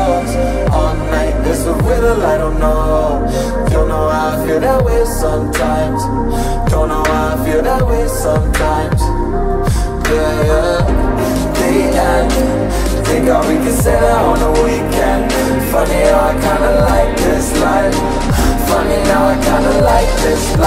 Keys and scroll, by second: 0.0 ctrl+v, 0.9 space, 11.6 Up, 12.2 Left.